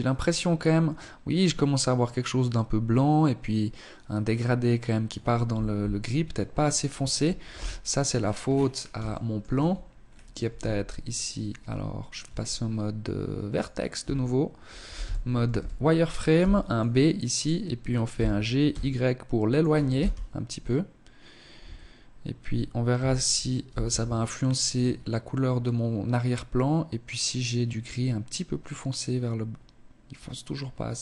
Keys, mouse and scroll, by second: 4.8 Escape, 5.5 right click, 6.4 KP_3, 7.0-7.8 scroll down 10, 7.9 shift+middle click, 8.4 Tab, 8.9-10.5 scroll down 2, 9.4 a, 10.5 Tab, 11.1 Tab, 12.4 click, 12.8 a, 13.8 z, 14.4 a, 15.2 b, 17.0 g, 18.8 KP_0, 20.5 Tab, 21.8 z.